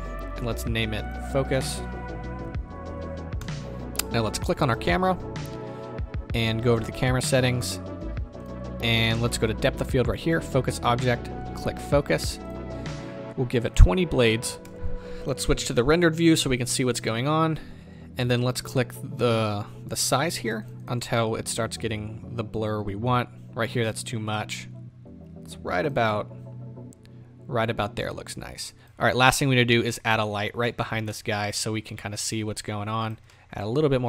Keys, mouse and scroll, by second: 12.5-14.7 drag, 14.7-15.5 right drag, 16.6 right click, 16.7-20.3 middle drag, 20.3-22.9 drag, 24.5 click, 28.8 z, 29.9-33.1 middle drag, 33.3-34.0 middle drag.